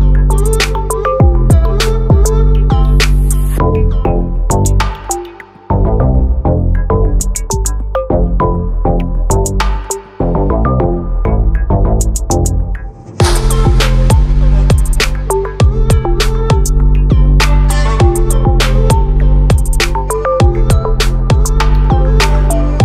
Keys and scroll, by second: 8.1 ctrl+t, 14.4 ctrl+=.